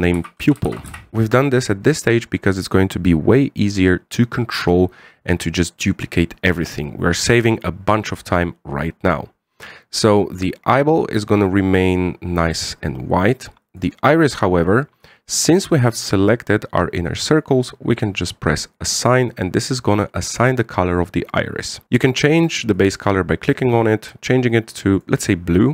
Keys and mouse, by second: 10.4 click, 10.8 click, 14.4 click, 19.7 click, 23.5 click.